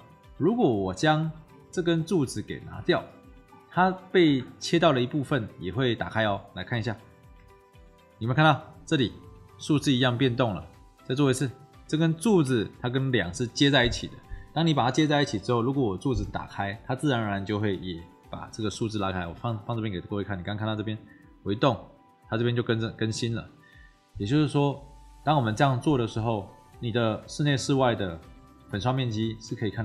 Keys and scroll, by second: 7.2 Delete, 21.3 Delete.